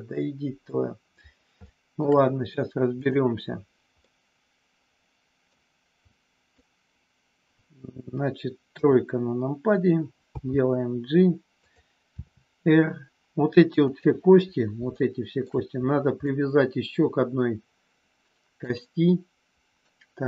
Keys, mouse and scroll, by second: 1.6 scroll up 1, 1.7 middle click, 3.0 click, 4.0 scroll up 1, 4.1-5.5 middle drag, 6.0 click, 8.6 KP_3, 10.2 g, 11.6 click, 12.1 r, 13.9 click, 15.0 shift+middle click, 16.2-18.6 middle drag, 18.7-19.9 middle drag.